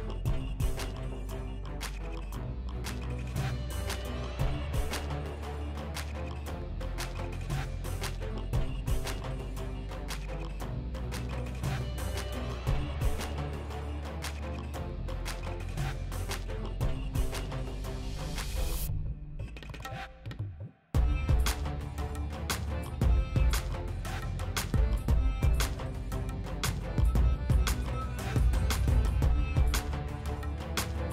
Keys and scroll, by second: 13.4 s, 26.6 s, 28.5 s, 29.8 s.